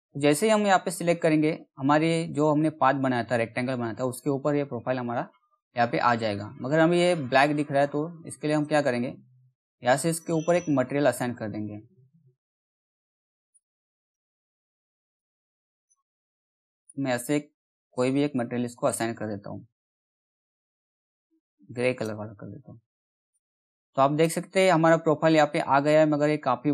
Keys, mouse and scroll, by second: 0.0 alt+middle click, 6.9-8.0 scroll up 1, 8.0 click, 13.0-20.0 drag, 20.7-22.7 drag, 23.8 middle click, 25.1 scroll up 1, 25.6-26.2 scroll down 1.